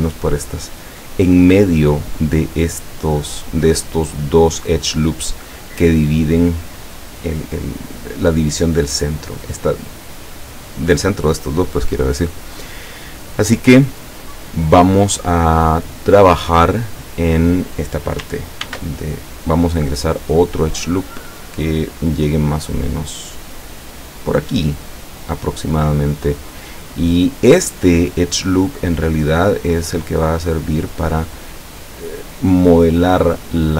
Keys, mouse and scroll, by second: 16.0-17.3 drag, 18.7 ctrl+r, 19.9 click, 24.9 click.